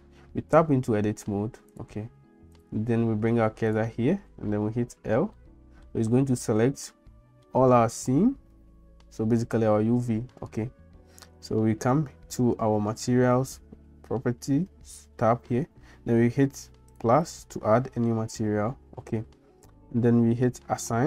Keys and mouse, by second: 0.4 Tab, 4.9 l, 5.4 middle click, 6.9 middle click, 17.0 click.